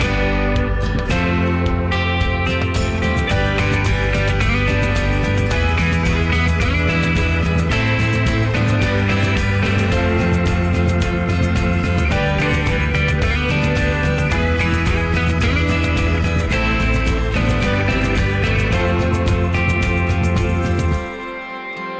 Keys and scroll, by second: 2.2 m, 4.2 p, 6.8 Escape, 7.6 p, 8.1 Escape, 9.4 p, 10.0 Escape, 13.0 q, 14.5-16.3 typing, 17.2 Escape, 18.0 ctrl+s.